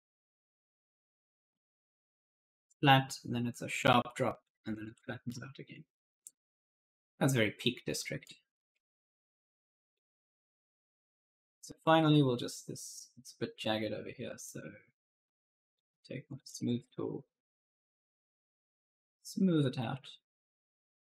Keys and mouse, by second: 4.9-6.2 typing, 5.1 right click, 6.2 right click, 7.6-8.3 typing, 7.8 right click, 9.7 click, 10.8 click, 11.0-12.0 typing, 11.3 right click, 14.3 click, 16.1 click, 18.4 click.